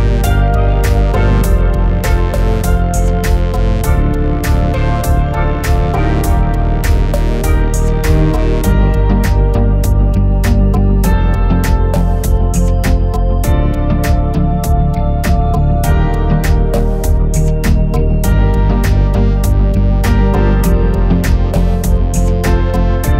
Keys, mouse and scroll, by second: 0.0 middle click, 0.1 click, 0.2 scroll down 3, 0.3 middle click, 0.4 /, 0.5 s, 0.8 g, 1.5 click, 1.5 scroll down 2, 1.6 g, 2.1 click, 2.5 click, 2.8 g, 4.2 shift+middle click, 4.4-8.4 typing, 4.9 click, 5.8 drag, 6.3 shift+click, 7.2 click, 9.0 middle drag, 9.2 scroll down 2, 9.2 shift+middle drag, 9.5 click, 9.5-12.3 typing, 10.6 click, 11.2 click, 12.2 click, 12.6 click, 12.7 ctrl+s, 14.0 ctrl+s, 14.1 shift+middle drag, 14.3 scroll down 3, 14.3 shift+middle click, 14.6 click, 15.7 click, 16.2 click, 16.9 scroll down 2, 17.1 click, 17.3 click, 17.5 scroll down 2, 17.9 click, 18.7 click, 19.2 n, 19.4 click, 20.0 click, 20.3 click, 21.6 click, 22.4 g, 22.6 s.